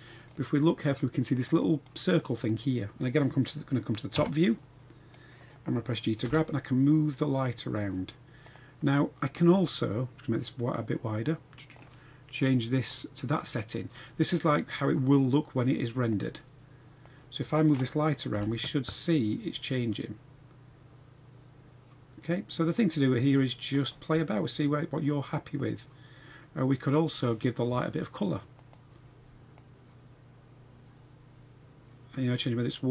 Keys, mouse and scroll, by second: 1.4 click, 4.1 KP_7, 6.2 g, 10.7-11.7 drag, 12.8 click, 16.1 click, 18.3 g, 24.1-25.0 middle drag, 25.5-27.2 drag, 28.5 click.